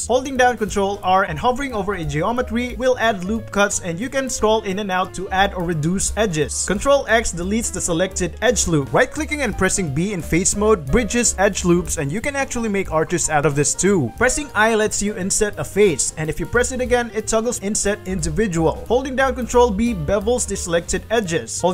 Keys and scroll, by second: 0.2 alt+s, 1.2 ctrl+r, 7.4 ctrl+alt+x, 7.8 ctrl+alt+x, 8.0 ctrl+alt+x, 8.2 ctrl+alt+x, 8.4 ctrl+alt+x, 8.9 ctrl+z, 9.9 b, 19.3 alt+shift+2, 19.8 b.